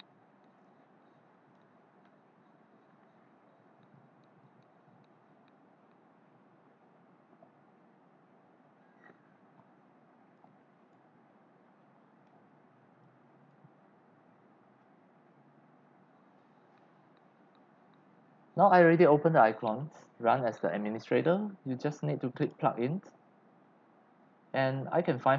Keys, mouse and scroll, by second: 9.7 click.